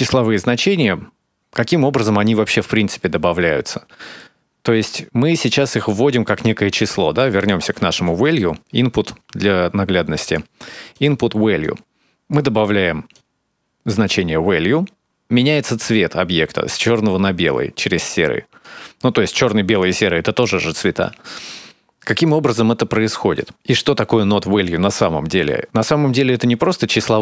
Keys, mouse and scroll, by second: 0.4 click, 0.9 click, 1.5 click, 5.2 middle click, 8.1 click, 8.8 shift+a, 12.6 click, 21.9 shift+click, 23.1 middle click.